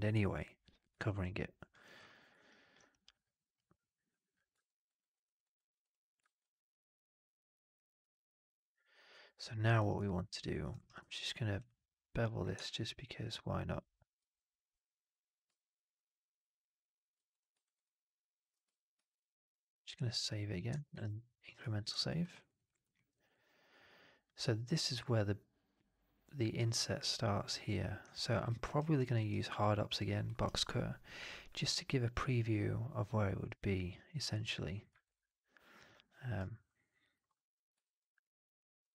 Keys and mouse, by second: 4.2 click, 4.7 alt+right drag, 5.0 alt+click, 5.3 alt+right drag, 6.1 alt+right drag, 6.3-9.5 alt+drag, 9.6 alt+right click, 9.8-10.4 alt+drag, 10.6 alt+right drag, 17.5 alt+right drag, 17.7-18.4 alt+drag, 18.8 ctrl+s, 20.1 alt+drag, 20.8 ctrl+s, 22.1 middle drag, 22.2 right drag, 22.4 right drag, 22.6 alt+click, 22.8 alt+middle drag, 23.0 alt+right drag, 23.2-24.1 alt+drag, 28.0 alt+drag, 28.3 alt+middle drag, 28.5 alt+right drag, 28.8 alt+drag, 29.2 alt+right drag, 29.4-29.8 alt+drag, 30.2 alt+middle click, 30.3 alt+right click, 34.9 alt+right click, 35.1 alt+click.